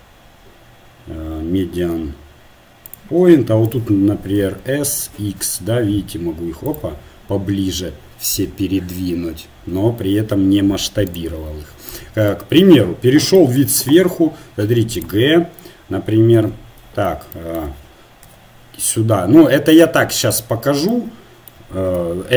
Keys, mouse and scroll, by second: 3.6-5.5 drag, 4.6 s, 11.1-13.0 drag, 13.0 KP_7, 13.9 g, 16.9 KP_1, 18.3 g, 22.1 KP_3.